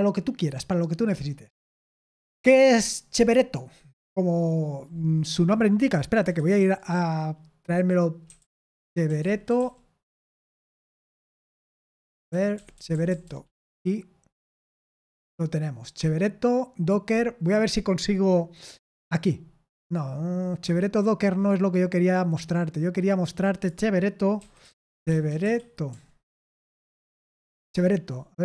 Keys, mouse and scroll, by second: 2.9-3.6 scroll down 1, 3.6-4.9 scroll up 1, 4.9-5.7 scroll up 1, 5.7-6.2 scroll up 1, 6.3 super+8, 7.9-10.0 typing, 11.4 Down, 12.2 End, 12.4 Down, 12.5 Down, 12.7 Down, 12.8 Down, 15.1 Return, 20.0-20.3 scroll down 1, 20.4-21.4 scroll up 1, 21.4 scroll up 1, 21.5 click, 23.4 click, 23.8 click, 24.1-27.1 typing, 27.4 Return.